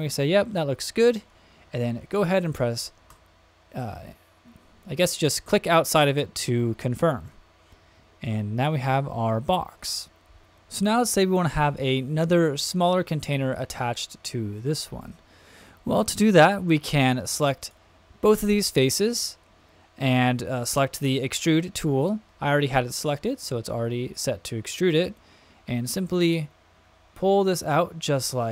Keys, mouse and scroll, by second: 3.1 Return, 5.0 click, 7.3-10.4 middle drag, 17.6 shift+click, 18.3 shift+click, 25.7-28.5 drag.